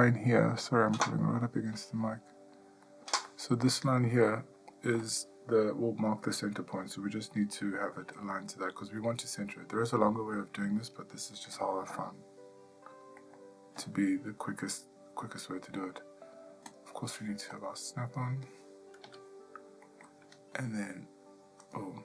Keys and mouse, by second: 1.1-2.5 middle drag, 2.8 middle click, 11.5 g, 17.5 click, 19.0 g.